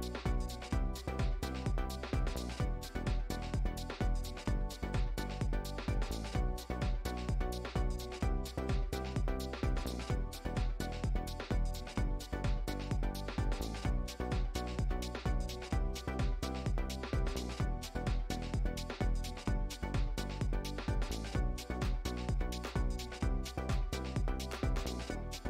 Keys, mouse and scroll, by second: 1.3 click, 1.9 Tab, 2.1-2.9 middle drag, 2.9 right click, 3.3 click, 4.6 click, 5.5 scroll down 3, 6.5 click, 8.1 click, 14.0-15.7 middle drag, 16.0 Tab, 16.3 a, 18.6-20.2 drag, 21.2-22.5 shift+drag.